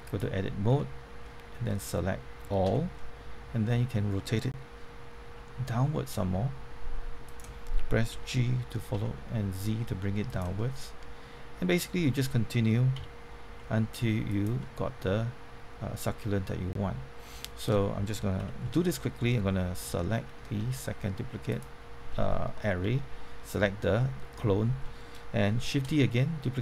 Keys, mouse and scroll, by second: 0.0 click, 0.7 Tab, 1.2 middle click, 2.6 a, 2.9-4.0 middle drag, 5.2 r, 7.2 click, 8.1-8.9 typing, 10.2 click, 10.5-12.0 middle drag, 12.7-13.9 typing, 14.2 click, 14.6-18.0 middle drag, 18.4 Tab, 18.6 middle click, 22.2 middle click, 25.7 shift+d.